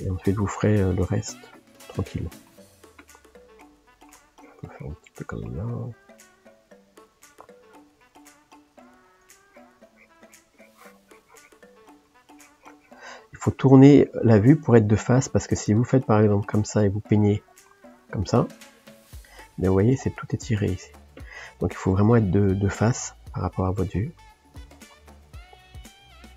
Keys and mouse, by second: 0.3 middle click, 1.0 click, 1.4-4.4 middle drag, 4.4 click, 5.1-9.5 middle drag, 9.5-11.7 drag, 11.7 middle click, 12.3 click, 13.2-18.5 middle drag, 18.5 click, 19.3-25.8 middle drag, 25.8 f.